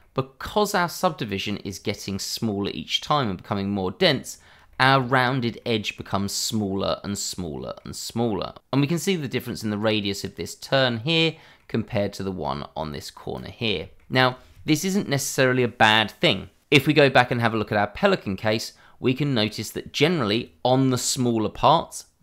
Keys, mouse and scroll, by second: 0.0 middle click, 3.7-4.0 scroll up 1, 4.0-4.6 scroll down 1, 4.7 shift+middle click, 4.7 middle click, 8.3 scroll down 1, 8.8-9.1 scroll up 1, 9.2 shift+middle click, 10.0 middle click, 11.7 middle click, 13.8-14.1 scroll down 1, 14.2 shift+middle click.